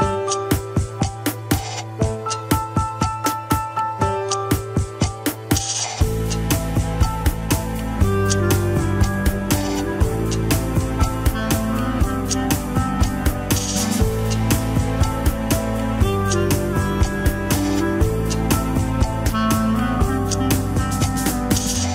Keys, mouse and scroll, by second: 0.9-1.2 scroll up 2, 1.2-2.2 middle drag, 2.2 g, 5.4 ctrl+Tab, 6.4 shift+click, 8.1 ctrl+click, 8.5 middle click, 9.2 alt+z, 9.4-10.7 middle drag, 10.7 Tab, 14.3 ctrl+i, 15.6 h, 16.0 click, 16.7 l, 17.4 l, 17.7 scroll down 1, 18.4 scroll up 2, 18.9 click, 19.4 alt+h, 21.3 ctrl+i.